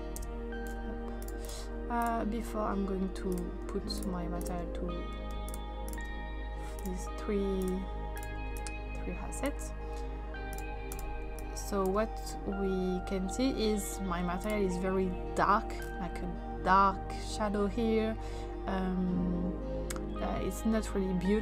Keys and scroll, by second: 0.2 Return.